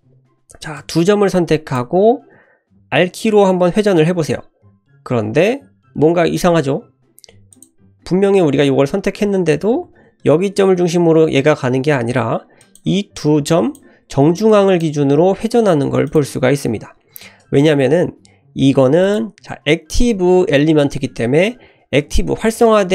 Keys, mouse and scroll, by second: 0.0 click, 0.7-1.8 drag, 4.3 r, 9.7 ctrl+z, 12.6 click, 13.1 click, 14.5 click, 15.0 r, 17.0 ctrl+z, 19.0-22.9 drag.